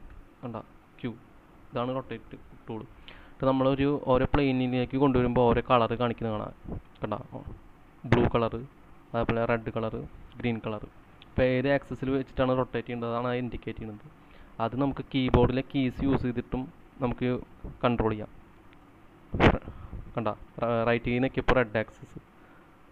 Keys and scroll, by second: 14.2-15.0 typing, 19.6 shift+Right.